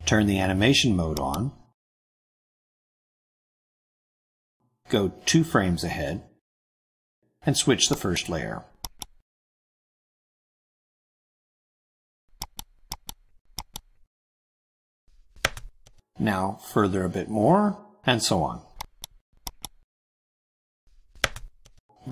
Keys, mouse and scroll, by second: 1.0 click, 3.1-3.9 scroll up 4, 4.4-5.5 drag, 6.3 click, 8.0 click, 8.7 click, 10.6-10.9 scroll down 1, 12.3 click, 12.7 click, 13.5 click, 15.0 BackSpace, 15.2 2, 15.4 Return, 16.9-18.1 drag, 18.7 click, 19.4 click, 20.8 BackSpace, 21.0 3, 21.1 Return.